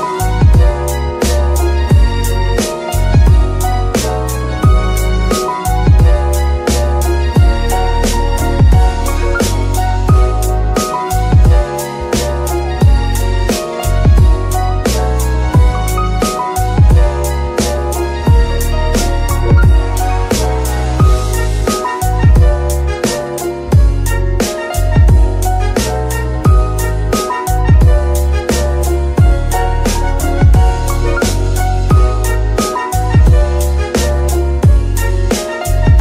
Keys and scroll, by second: 0.0 Tab, 1.3 s, 3.7 g, 3.8 y, 6.5 KP_3, 7.9 Tab, 8.4 s, 9.5 Tab, 11.3 shift+g, 12.4 z, 13.2 g, 13.8 shift+g, 22.3 z, 29.9 KP_7, 31.7 g, 32.0 x.